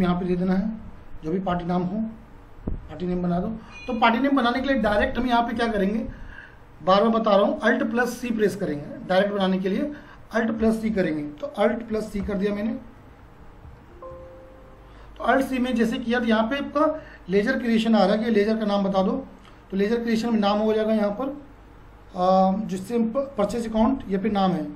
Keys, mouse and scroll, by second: 1.0 F4, 1.5 F4, 18.3 F4.